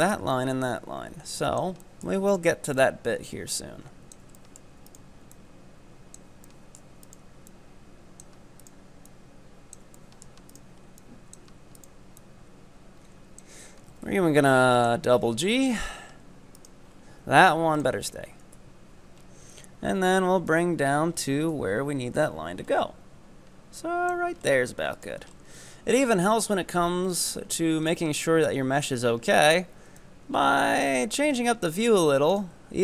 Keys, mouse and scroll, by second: 1.9 shift+middle click, 2.4 right click, 2.8-4.4 drag, 4.4 shift+middle click, 5.0 right click, 5.4-6.5 drag, 6.5 shift+middle click, 7.0 right click, 7.5-8.6 drag, 8.6 right click, 9.1 click, 10.0 shift+middle click, 10.5 right click, 11.0 click, 11.9 right click, 12.2-14.0 drag, 14.0 g, 15.1 scroll down 6, 15.5 shift+middle click, 15.9-16.6 scroll up 3, 16.6 middle click, 16.6 right click, 16.9-17.2 scroll down 4, 17.2 z, 17.8 ctrl+right click, 18.6 KP_3, 19.2-20.5 scroll up 2, 20.5-21.5 drag, 21.5 KP_1, 22.2-23.9 scroll up 8, 23.9 click, 24.5-25.1 scroll up 3, 25.1 right click, 25.3 scroll up 2, 26.8 scroll up 1, 27.3 ctrl+right click, 27.9 z, 29.4 z, 30.0-31.8 drag, 31.8 z, 32.3 right click.